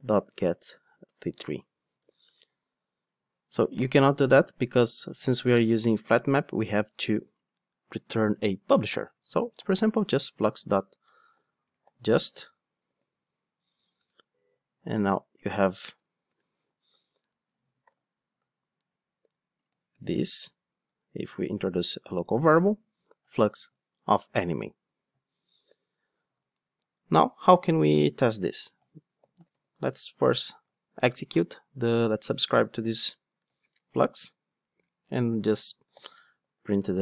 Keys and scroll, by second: 13.2 Return, 19.9 alt+Return, 30.2 Return.